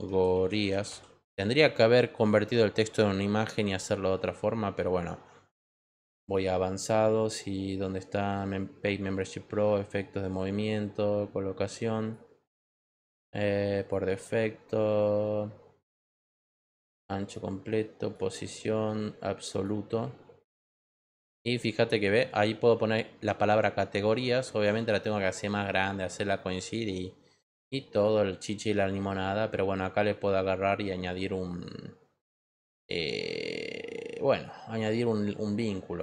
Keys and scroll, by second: 0.0-1.3 typing.